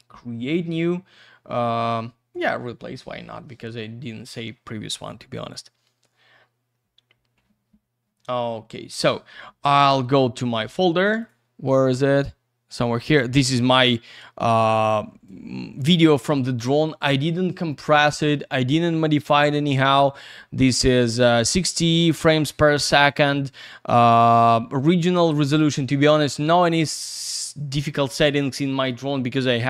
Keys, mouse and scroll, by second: 2.3 click, 2.4 click, 9.7 click, 9.8 click, 11.5 click, 13.0 click, 13.2 click, 14.5 click, 16.2 click.